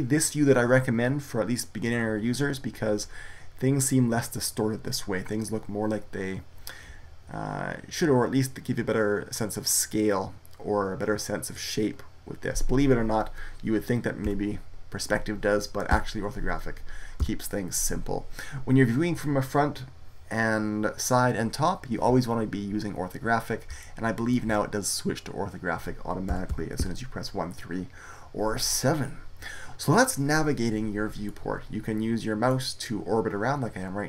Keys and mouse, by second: 14.1 KP_5, 15.8 KP_5, 17.1 KP_1, 26.2 KP_1, 26.4 KP_3, 26.7 KP_7, 31.2-34.0 middle drag.